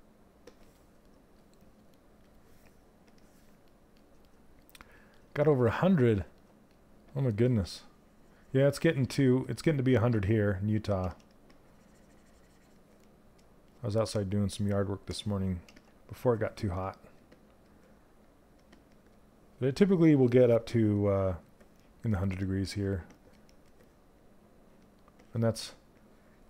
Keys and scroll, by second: 15.2 s.